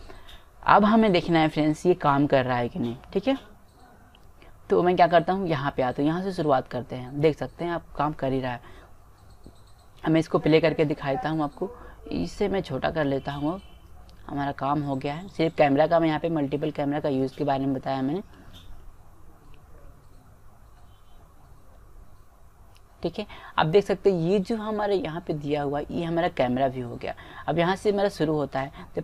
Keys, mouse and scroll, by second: 6.5-8.0 drag, 9.5 middle click, 13.4-17.6 drag, 17.6-20.6 middle drag.